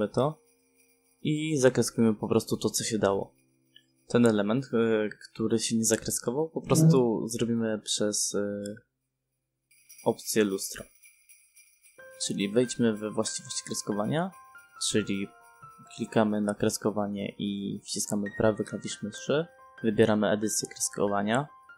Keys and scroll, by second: 2.7 space, 7.3 space.